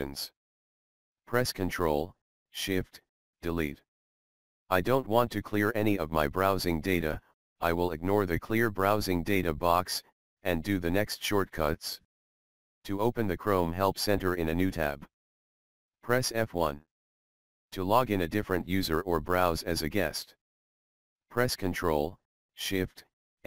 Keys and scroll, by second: 0.6 ctrl+shift+Delete, 15.8 F1, 17.8 F1, 23.1 ctrl+shift+m.